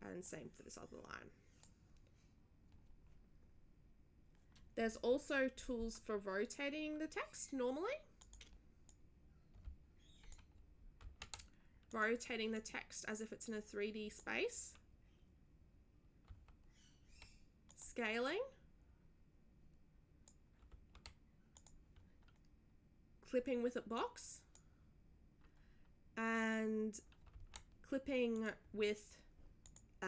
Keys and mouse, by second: 0.2-1.6 drag, 1.8 click, 8.2 click, 8.9-10.3 drag, 11.0 ctrl+z, 11.9 click, 12.5-14.2 drag, 16.2 ctrl+z, 17.7 click, 18.2-20.3 drag, 20.7 ctrl+z, 21.5 click, 23.9-24.5 drag, 27.3 ctrl+z, 28.3 click, 29.6 drag.